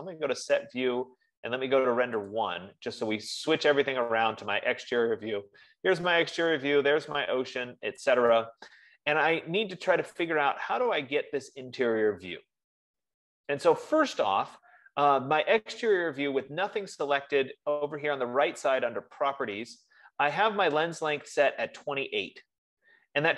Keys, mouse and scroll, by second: 2.7 click, 22.2-23.3 drag.